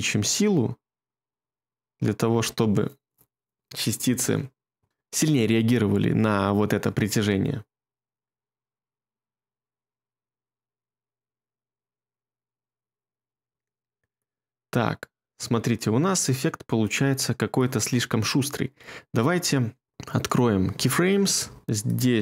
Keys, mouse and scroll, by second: 6.8 space, 13.4 space.